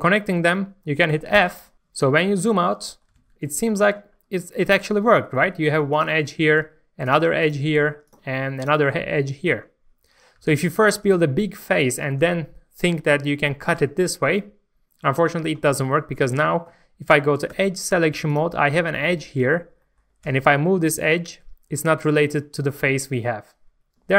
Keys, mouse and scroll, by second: 0.1 scroll up 1, 0.5 shift+middle click, 1.7-2.1 scroll down 1, 2.4 Tab, 2.6 middle click, 3.2 alt+a, 3.4 middle click, 3.8 Tab, 4.1-4.9 scroll up 1, 4.9 middle click, 6.0 click, 9.0 middle click, 10.2 scroll up 1, 10.4 alt+a, 10.8 shift+middle click, 17.5 2, 18.3 click, 18.6-20.8 middle drag, 20.2 g.